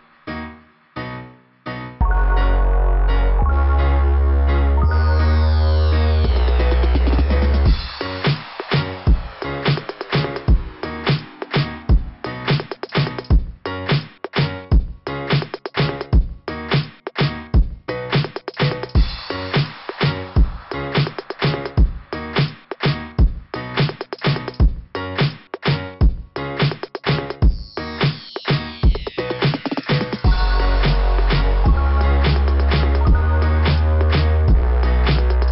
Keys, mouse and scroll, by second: 2.3 click, 3.3 click, 5.1 click, 10.0 click, 10.3 click, 10.6 click, 13.2 scroll up 2, 16.6 scroll down 2, 17.6 right click, 19.5 click, 20.3 right click, 22.4 click, 24.2 click, 25.8 click, 26.9 scroll down 1, 27.6 scroll down 1, 29.1 click, 30.0 click, 31.6 scroll down 2, 33.9 scroll up 2.